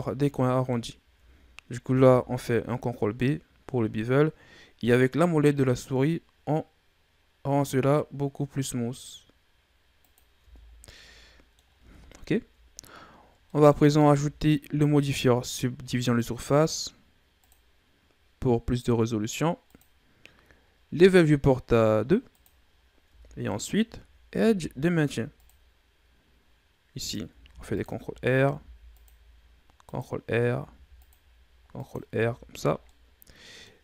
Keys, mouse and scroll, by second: 1.7 ctrl+b, 10.3 Tab, 10.5 scroll down 1, 10.8-12.9 middle drag, 12.9-13.4 scroll up 2, 13.4 middle click, 13.7 scroll up 2, 14.0 Tab, 14.6 Tab, 15.9-19.0 drag, 19.5-22.6 drag, 22.6-23.0 scroll up 2, 23.0 Tab, 23.4 middle click, 24.2 ctrl+r, 27.3 ctrl+r, 28.4 ctrl+r, 32.1 Tab, 32.4 scroll down 2, 32.7-33.8 middle drag.